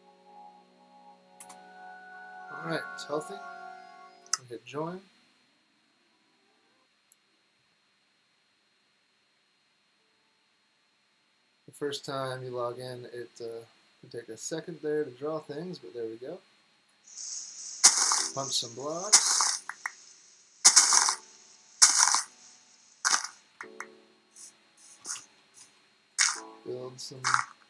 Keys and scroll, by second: 1.1-1.8 typing, 7.4-8.1 typing, 15.6-16.4 typing, 19.0-20.7 typing, 21.8 typing, 22.9-26.0 typing.